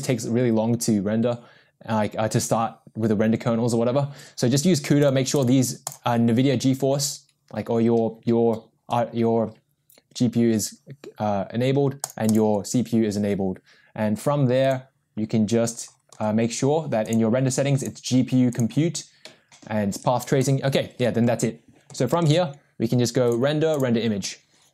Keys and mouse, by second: 17.8-18.6 drag, 23.2 ctrl+s, 23.2 click.